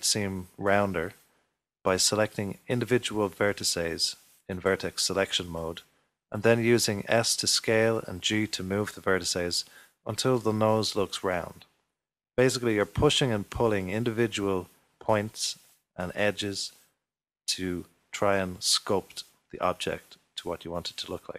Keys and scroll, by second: 3.7 s, 9.4 s, 16.8 s.